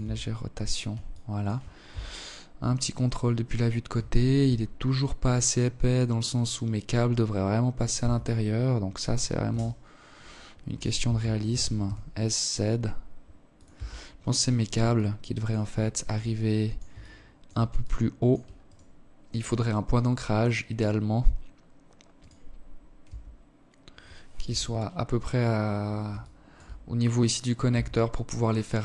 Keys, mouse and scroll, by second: 0.2 KP_3, 0.9-1.3 scroll up 5, 1.3 scroll down 1, 2.4 alt+shift+click, 2.9-3.3 scroll up 2, 4.6 right click, 5.1-5.7 scroll down 3, 5.7 scroll up 3, 6.1 right click, 6.3 Tab, 6.3 scroll down 1, 7.8 s, 9.9 s, 12.1 Tab, 12.3-13.3 scroll down 3, 13.3 alt+click, 14.1 alt+shift+click, 14.7 alt+click, 15.3 alt+shift+click, 16.1 alt+click, 17.0 right click, 18.1 right click, 18.3 right click, 18.7 right click, 19.1 right click, 20.5 right click, 21.4 Tab, 22.7 KP_7, 23.3-23.8 scroll down 9, 24.5 alt+shift+click, 26.1 Tab, 28.0 ctrl+s.